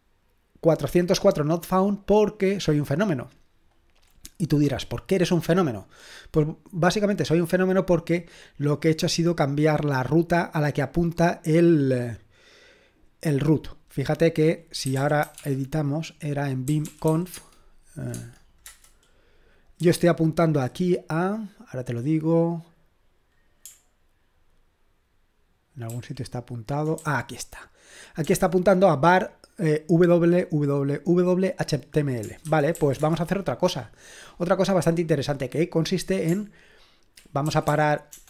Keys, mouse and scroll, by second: 3.2 click, 4.1-7.1 scroll up 1, 7.1 click, 8.1-9.9 scroll up 1, 9.9-10.6 scroll up 1, 10.6-11.6 scroll up 1, 11.6-14.0 scroll up 1, 14.0 click, 14.6-17.6 typing, 18.1 Tab, 18.6 Return, 19.8-20.6 typing, 25.9 ctrl+d, 27.0-28.0 j, 28.2 k, 32.2-33.2 typing, 37.2-38.2 typing.